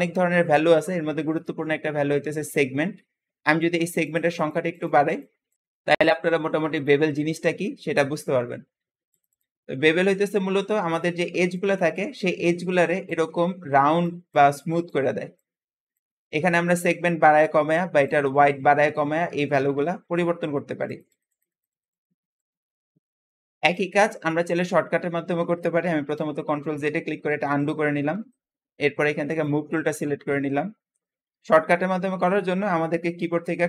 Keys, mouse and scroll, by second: 3.9-5.6 drag, 9.0 click, 9.7-10.3 scroll up 3, 10.3-10.9 scroll down 1, 10.9-17.3 shift+middle drag, 12.3 `, 17.3 Escape, 17.9-24.0 drag, 24.0 Tab, 24.4-24.9 scroll down 2, 24.9 Tab, 25.0 Tab, 25.9 ctrl+z, 26.0 ctrl+z, 26.5 ctrl+z, 27.0 ctrl+z, 27.8-28.2 scroll down 1, 28.2-29.2 shift+middle drag, 29.2 shift+click, 29.9 shift+middle click, 30.5-31.4 scroll up 1, 31.4-31.9 scroll up 1, 31.9-33.6 shift+middle drag.